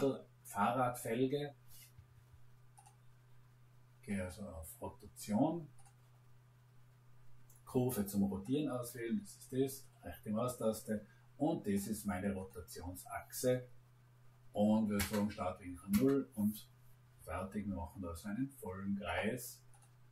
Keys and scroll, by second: 1.9 Escape, 14.9 Return.